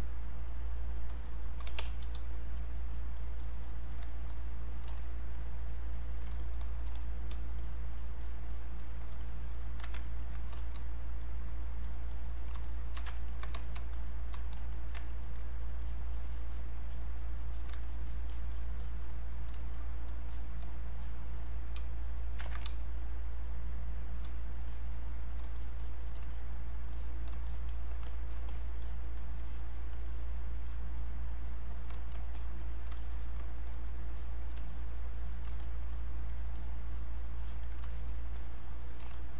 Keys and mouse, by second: 1.4-2.2 typing, 2.0 click, 2.9 alt+click, 4.0 alt+click, 4.1 shift+click, 4.9 click, 5.6 alt+click, 7.0 click, 7.6 alt+click, 9.2 shift+click, 10.1 ctrl+right click, 10.4 click, 11.2 click, 11.8 alt+click, 13.2 ctrl+right click, 13.5 ctrl+click, 13.9 click, 14.7 alt+click, 15.1 ctrl+right click, 15.8 alt+click, 19.8 click, 21.0 click, 21.8 space, 22.5 ctrl+z, 22.6 space, 23.4 click, 23.5 space, 24.6 click, 25.6 shift+click, 26.3 click, 27.5 shift+click, 28.8 click, 29.4 alt+click, 32.4 alt+click, 34.1 click, 34.7 shift+click, 35.9 click, 36.5 alt+click, 37.8 shift+click, 38.3 shift+click.